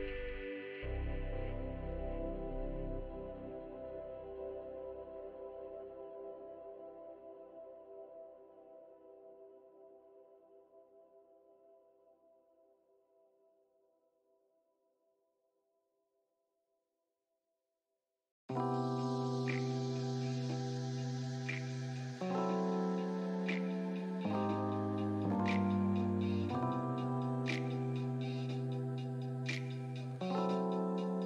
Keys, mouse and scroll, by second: 4.2 alt+middle click, 5.1-6.2 middle drag, 6.2 space, 8.0 f, 8.6 click, 9.4 middle click, 9.9-13.8 drag, 13.8 middle click, 14.2 click, 15.2 middle click, 15.6-17.2 drag, 17.2 middle click, 17.6-18.8 drag, 18.8 middle click, 19.2-21.3 drag, 21.3 middle click, 21.7-23.2 drag, 23.2 middle click, 23.6 click, 24.5 middle click, 24.9 click, 25.5 middle click, 26.3 f, 27.0-28.0 middle drag, 28.0-29.4 drag, 29.4-31.2 middle drag.